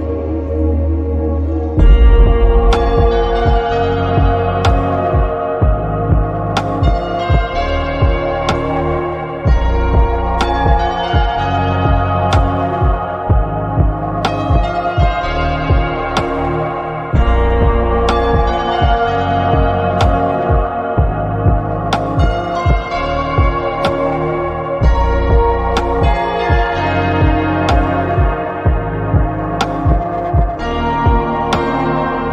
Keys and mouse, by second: 10.0 click, 18.1 click, 23.9-27.7 drag, 29.4 click.